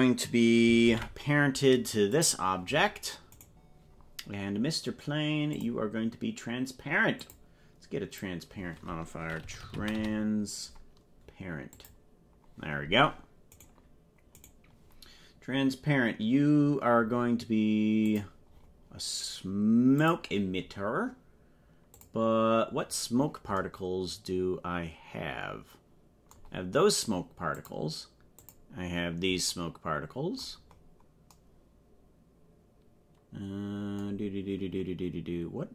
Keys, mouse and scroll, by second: 0.8 ctrl+p, 3.4 right click, 5.5 click, 7.3-11.9 drag, 13.5 right click, 14.4 right click, 18.0 click, 18.5-19.1 scroll down 10, 20.0 click, 22.1 click, 22.8-23.3 scroll down 11, 27.6 click, 28.5 click, 30.7-31.1 scroll up 3.